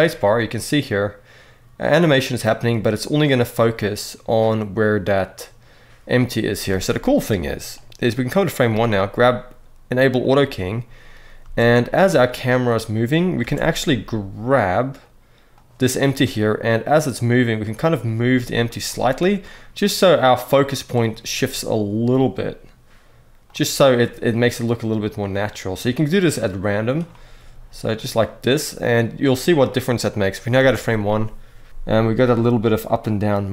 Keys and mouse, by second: 6.4 space, 7.6 click, 10.0 click, 11.2 space, 13.1 space, 13.6 g, 16.5-17.4 drag, 17.9 g, 19.2-20.6 drag, 21.8 g, 24.1-26.7 drag, 27.1 g, 27.7-30.2 drag, 30.3 space.